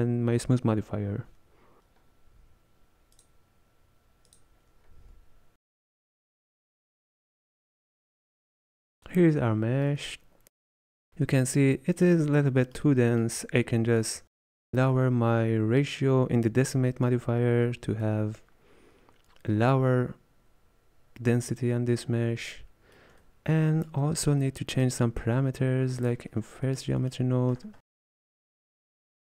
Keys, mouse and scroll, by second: 7.3 click, 7.5-20.8 middle drag, 23.3-26.1 ctrl+middle drag, 26.1-29.2 drag.